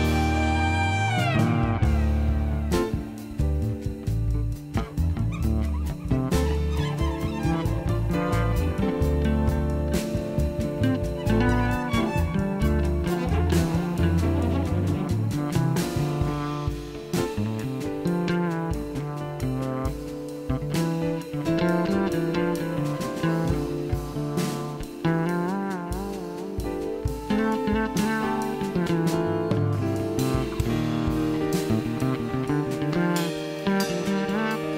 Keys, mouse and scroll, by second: 0.0 click, 1.0 click, 1.9 right click, 2.7 click, 3.9 click, 4.9 click, 13.4 click, 14.1 click, 15.5 click, 16.6 click, 18.3 click, 19.2 click, 20.5 click, 21.5 click, 24.2 click, 25.4 click, 26.9 click, 27.7 click, 28.8 click.